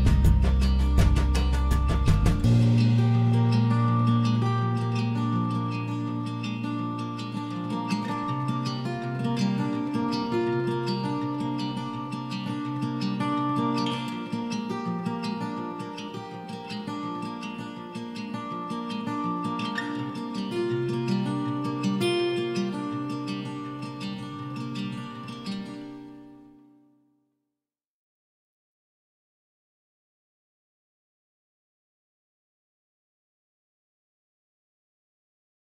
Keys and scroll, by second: 0.2 Delete, 9.5 Escape, 14.3 Escape, 16.2 Escape, 18.9 Escape, 23.1 ctrl+h, 27.6 p, 31.1 Escape, 31.8 p.